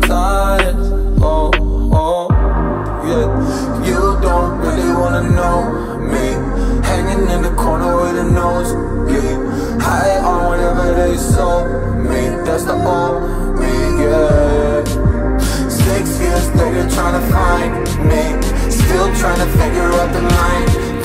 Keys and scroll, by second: 11.4 space, 13.7 ctrl+z.